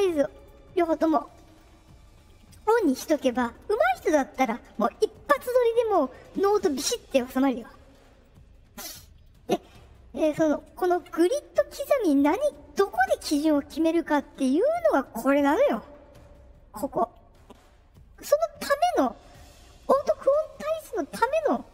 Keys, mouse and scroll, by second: 0.3 right click, 3.7 click, 5.3 right click, 8.0 scroll up 2, 11.1-12.0 scroll up 2, 15.5 click.